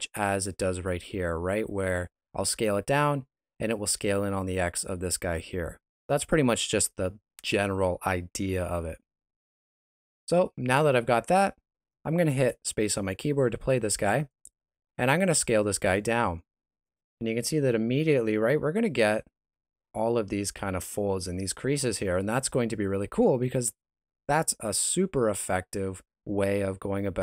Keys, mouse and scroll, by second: 0.9 s, 9.8 middle click, 13.6 space, 14.9 s, 26.8 Escape.